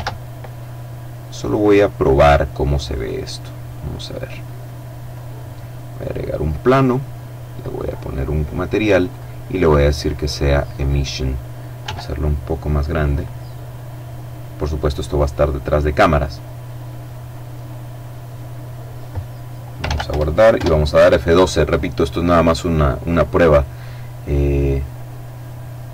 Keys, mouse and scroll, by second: 0.3 click, 2.0 click, 3.4 click, 4.3 right click, 6.4 click, 8.0 click, 9.7 click, 10.7 s, 12.0 click, 18.8 ctrl+s, 19.0 ctrl+Return, 19.4 ctrl+F12.